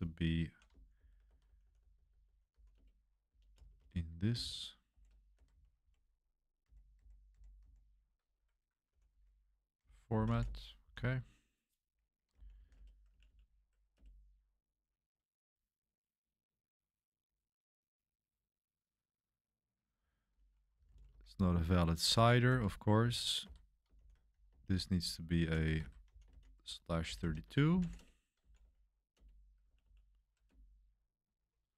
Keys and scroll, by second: 1.0-10.8 typing, 12.1-13.2 typing, 13.9 Return, 20.4-23.9 typing, 25.0 j, 25.6 BackSpace, 26.8-29.1 typing, 29.1 Return, 29.6 Page_Up, 29.8 Page_Up, 30.5 Return.